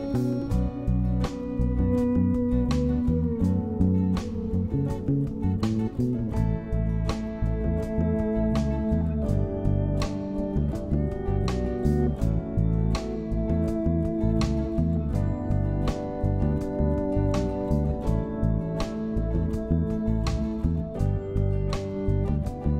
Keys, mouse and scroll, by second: 7.9 q, 9.6 Right, 20.8 m.